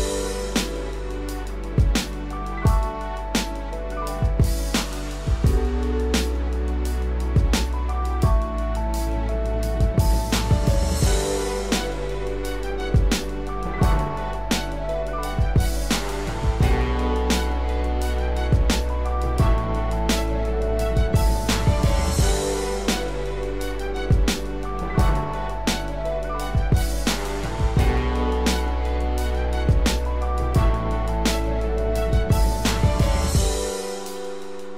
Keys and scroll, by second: 6.3 ctrl+0, 7.1 ctrl+=, 23.5 ctrl+z, 31.7 ctrl+Return.